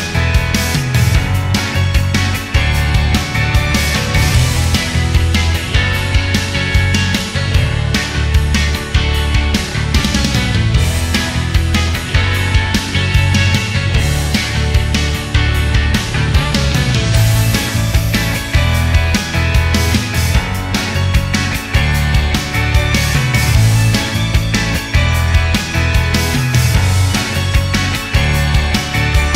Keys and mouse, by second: 8.3-9.4 middle drag, 11.3 click, 11.8 click, 13.9 click, 15.1 click, 16.0 click.